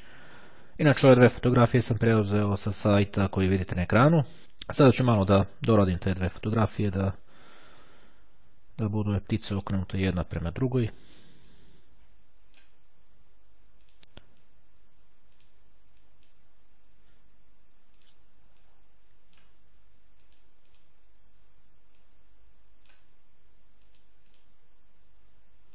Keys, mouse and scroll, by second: 0.0 click, 6.0 click, 7.1-10.2 drag, 10.7 click, 11.6-13.2 drag, 14.0 click, 15.5 click, 16.1 click, 18.1-19.9 drag, 20.3-21.3 drag, 22.1-23.5 drag, 23.9-24.9 drag.